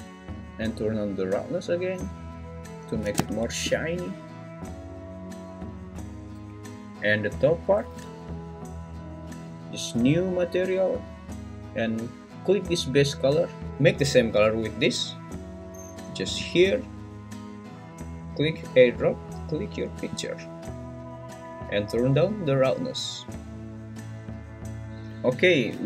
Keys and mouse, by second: 0.5-2.5 drag, 10.1 click, 23.3-24.8 drag, 24.8 Tab.